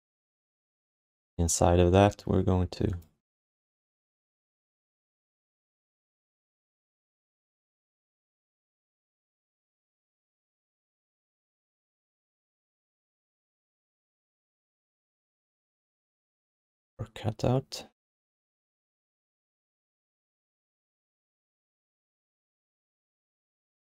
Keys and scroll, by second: 8.1 q, 8.5 r, 20.9 q, 21.5 alt+shift+d, 21.8 ctrl+s, 23.3 alt+shift+d, 23.6 ctrl+s.